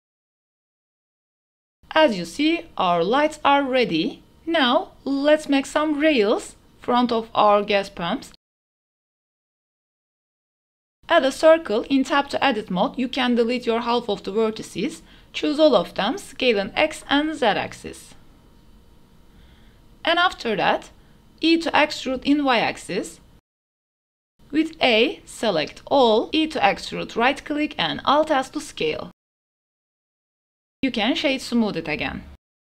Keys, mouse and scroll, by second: 0.0-0.9 typing, 0.2 shift+click, 0.8 shift+middle click, 1.5 shift+click, 2.0-2.6 middle drag, 2.8-3.2 middle drag, 3.4 shift+middle drag, 4.1 g, 4.2 x, 4.3 shift+s, 4.6 shift+a, 7.0 shift+drag, 7.8-9.5 typing, 8.6 KP_Enter, 10.0 click, 10.6 shift+click, 10.7 click, 10.9 Tab, 11.0 click, 11.6 KP_1, 13.0 click, 14.0 x, 14.5 x, 15.9 click, 16.3 s, 16.6 x, 17.9 s, 18.2 y, 19.2 z, 20.4 middle click, 20.7-22.2 typing, 21.0 middle click, 21.2 middle click, 23.9 click, 24.0 middle click, 24.4 a, 24.5 click, 25.0 e, 25.8 alt+s, 29.2 Tab, 29.4-29.7 drag, 30.0 click, 30.4-31.1 drag, 31.9 click.